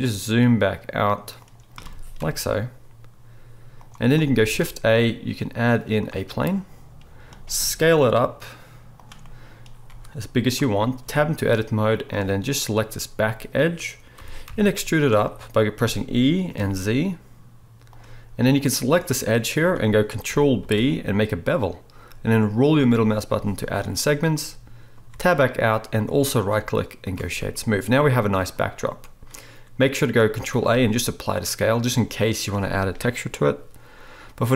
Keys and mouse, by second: 1.5-10.9 middle drag, 1.8 g, 4.4 shift+a, 7.5 s, 9.9 s, 11.0 Tab, 12.1 click, 14.2 g, 15.7 e, 20.6 ctrl+b, 23.7-26.0 middle drag, 25.1 Tab, 26.0-30.3 right drag, 30.5 ctrl+a.